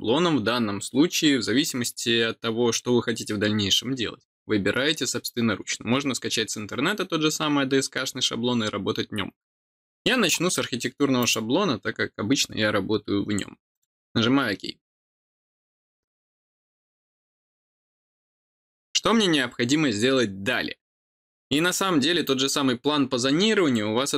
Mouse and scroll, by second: 11.2 click, 13.7 click.